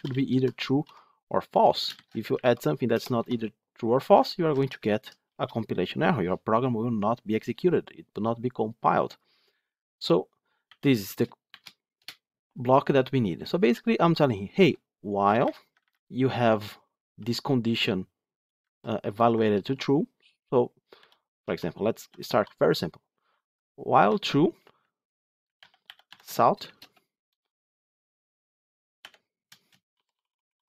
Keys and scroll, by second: 26.1 Tab.